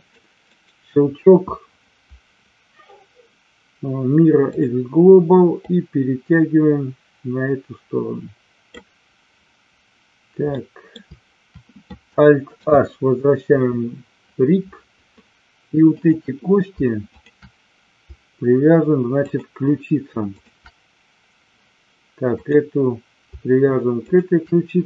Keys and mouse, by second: 0.6-4.7 right drag, 5.7-8.7 drag, 10.6 middle click, 12.6 alt+h, 15.8 click, 17.0 shift+click, 19.2 shift+click, 20.2 shift+click, 22.3 click, 24.1 shift+click.